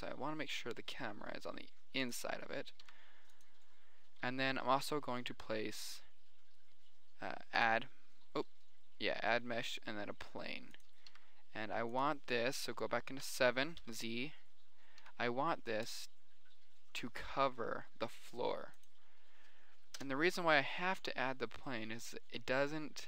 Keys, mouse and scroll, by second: 3.2 s, 3.3-3.7 middle drag, 3.9-5.0 middle drag, 5.0 shift+a, 9.9 g, 11.5 s, 13.6 KP_7, 14.1 z, 14.7 click, 15.3 click, 15.3 s, 15.9 click, 17.4 s, 20.5 KP_0, 21.4 z.